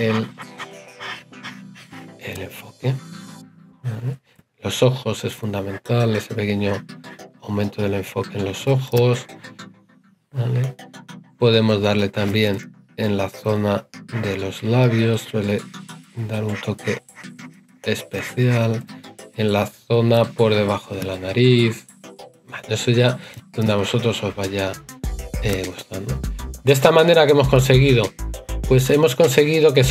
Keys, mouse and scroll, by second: 2.1 right click, 4.1 right click, 12.3 right click, 18.6 right click.